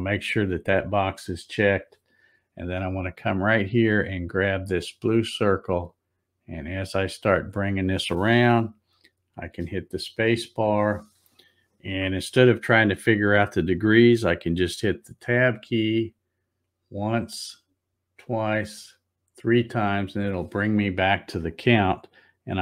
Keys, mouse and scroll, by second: 5.0-9.6 drag, 9.4 space, 15.9 Tab, 17.3 Tab, 18.7 Tab.